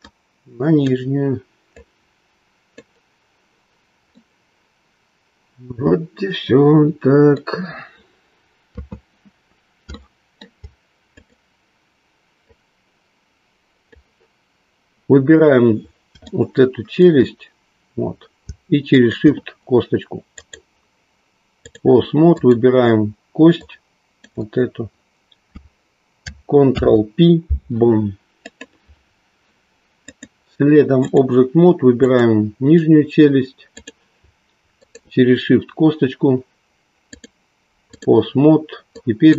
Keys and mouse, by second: 0.0-3.0 drag, 4.0-7.8 middle drag, 9.1 KP_3, 10.0-11.4 shift+middle drag, 12.6-13.9 drag, 17.0 shift+middle click, 18.9 shift+click, 20.4-23.4 drag, 23.6 click, 26.6 ctrl+p, 30.1-31.2 drag, 32.1 click, 33.8 click, 37.0-38.0 drag, 39.0 click.